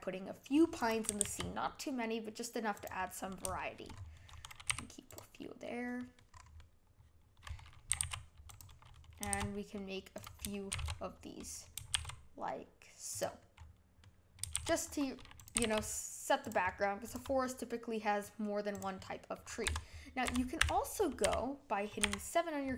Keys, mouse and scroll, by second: 1.0 g, 3.0-3.9 middle drag, 3.9-4.6 scroll up 6, 4.6 g, 5.3-6.3 middle drag, 6.3 scroll down 1, 6.5-7.9 middle drag, 7.9 g, 9.3 shift+d, 10.7 shift+s, 11.9 shift+d, 13.5 scroll down 1, 14.0 middle click, 14.5 shift+d, 15.5 g, 16.6-17.0 middle drag, 17.0 click, 17.4-18.7 middle drag, 18.7 click, 19.0-19.6 middle drag, 19.6-22.0 typing.